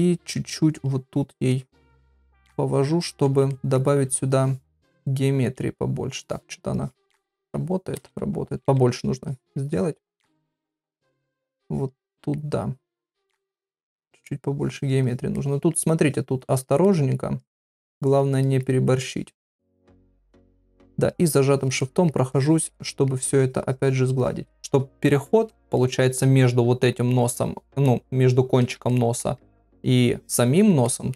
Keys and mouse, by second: 0.7 click, 1.1 click, 1.5 click, 1.9 middle click, 2.6 click, 3.0 click, 3.5 ctrl+middle click, 6.8 click, 7.4 ctrl+z, 7.9 ], 8.1-8.5 ], 9.3 click, 9.3 ], 9.7 click, 10.1 click, 10.4 middle click, 11.1 click, 11.7 click, 12.1 middle click, 12.8 click, 13.5 click, 13.9 middle click, 14.6 click, 15.0 click, 15.4 middle click, 16.1 click, 16.5 click, 16.8 middle click, 17.4 click, 17.7 click, 18.0 click, 18.3 middle click, 19.0 click, 19.5 middle click, 20.2 click, 20.6 middle click, 21.1 shift+click, 21.8 middle click, 22.3 shift+click, 22.8 middle click, 23.3 shift+click, 24.2 shift+click, 24.5 middle click, 25.8 ctrl+middle click, 28.9 ctrl+middle click, 30.9 ctrl+middle click.